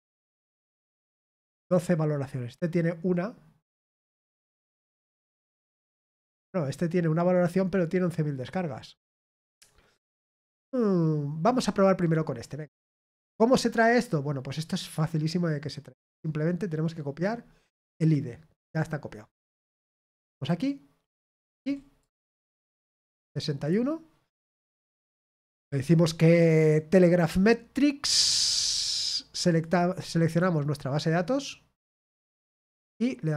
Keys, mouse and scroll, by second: 11.9 click, 17.8 click, 19.9 click, 21.0 click, 22.0 click, 22.5 ctrl+v, 23.6 click, 29.4 click, 30.2 click.